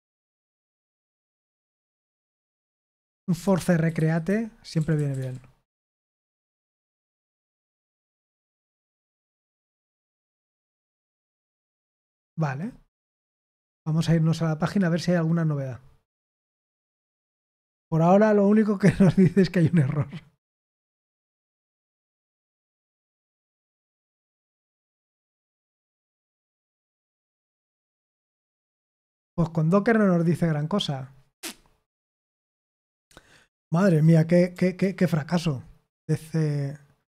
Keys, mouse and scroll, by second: 2.3-5.8 typing, 6.6 Return, 8.4 Return, 9.0-10.1 typing, 11.5 Return, 13.5 click, 14.6 click, 32.6 click, 33.8 Return, 34.7 ctrl+c.